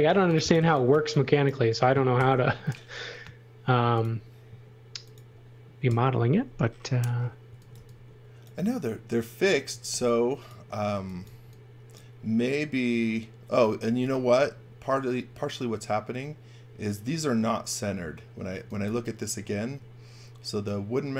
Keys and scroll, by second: 0.1 space, 0.5 x, 0.9 v, 2.1 shift+5, 3.8 space, 5.8 Delete, 7.4 x, 7.7 v, 9.6 x, 9.9 v, 10.9 x, 11.2 v, 18.3-19.6 typing.